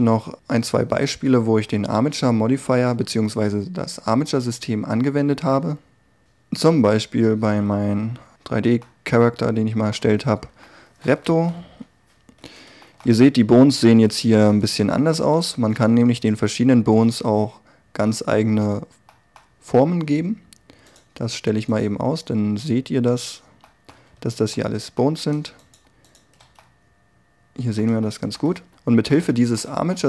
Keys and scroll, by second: 11.4 1, 16.4 r, 24.0 a.